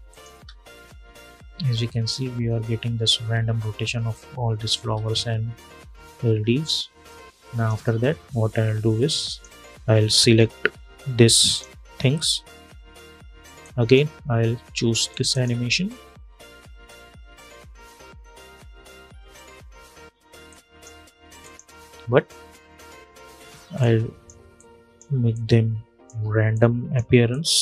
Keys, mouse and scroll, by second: 0.0 space, 4.5 space, 6.8 click, 7.8 scroll down 1, 9.0 click, 10.0 scroll up 1, 11.2 shift+click, 13.3-14.8 drag, 18.2 space, 20.2 click, 21.7 =, 22.0 scroll down 1, 23.5-27.6 drag.